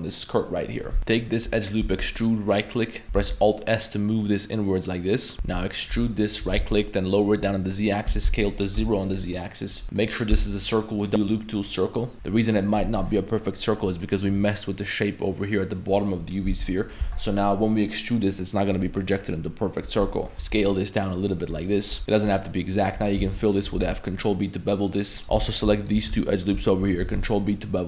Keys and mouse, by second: 0.7 middle click, 1.0 alt+s, 1.0 ctrl+z, 1.2 alt+right click, 1.8 e, 3.2 alt+s, 5.4 e, 6.4 g, 7.7 middle click, 8.1 s, 9.2 middle click, 9.8 middle click, 10.3 w, 11.8 middle click, 13.1-13.9 middle drag, 14.0 middle click, 15.2 middle click, 16.5 z, 16.6 middle click, 20.3 s, 21.5-21.9 middle drag, 22.0 g, 22.0-22.5 middle drag, 22.9 middle click, 23.2 f, 23.5 middle click, 23.8 ctrl+b, 25.2 z, 25.3 a, 26.3 alt+shift+right click, 27.0 ctrl+b.